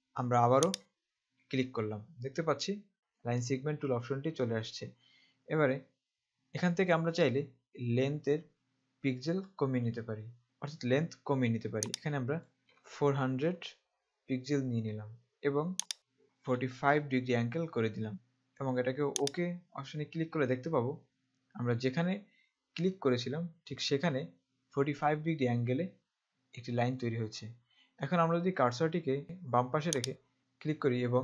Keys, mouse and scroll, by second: 0.9 click, 11.9 click, 12.7 KP_4, 13.1 KP_0, 16.0 click, 16.5 KP_4, 16.8 KP_5, 19.4 click, 30.2 click.